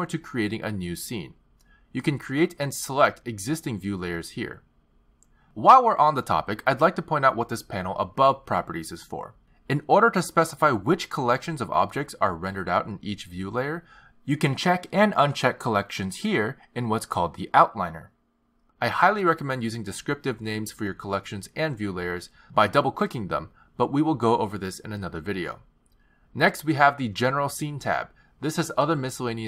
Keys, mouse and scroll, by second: 0.0 click, 2.1 click, 4.0 click, 5.2 click, 12.7 click, 14.7 click, 15.5 click, 16.5 click, 18.2 click, 19.3 click, 20.6 click, 20.8 click, 27.3 click, 29.1 click.